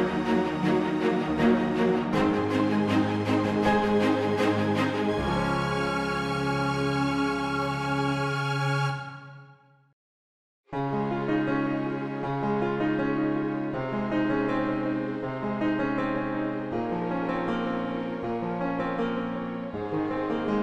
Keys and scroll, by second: 18.9 space.